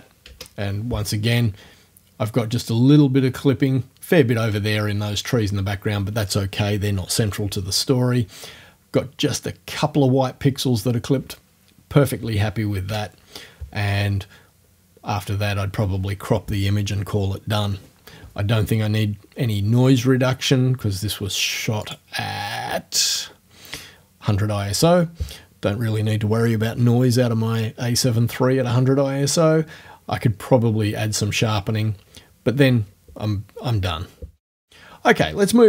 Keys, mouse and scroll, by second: 0.3 o, 12.9 o, 21.9 click.